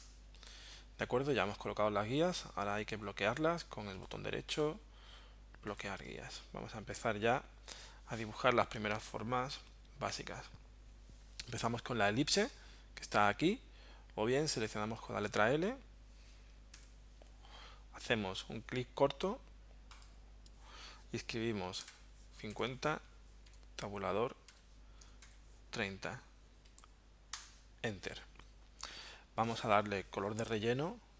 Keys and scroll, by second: 16.8 l, 21.9 5, 22.5 0, 23.5 Tab, 24.5 3, 25.2 0, 27.3 Return.